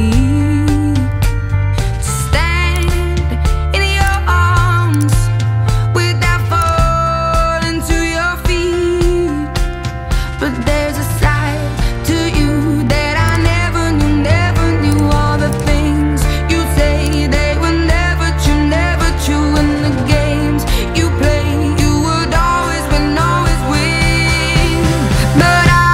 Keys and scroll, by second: 0.0 Return, 3.4 Delete.